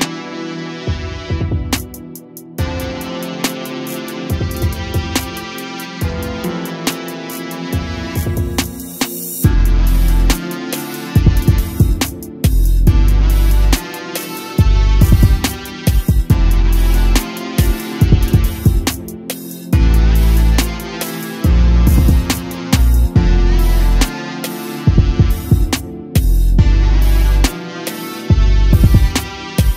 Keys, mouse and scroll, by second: 0.8 a, 1.0 a, 2.1 click, 3.6-4.5 drag, 4.5-5.0 scroll down 5, 5.3-5.8 middle drag, 5.8 click, 6.5 shift+a, 11.5-12.8 scroll up 8, 12.8 click, 14.5-16.8 middle drag, 16.8-18.0 drag, 18.0-20.4 middle drag, 20.4-23.4 drag.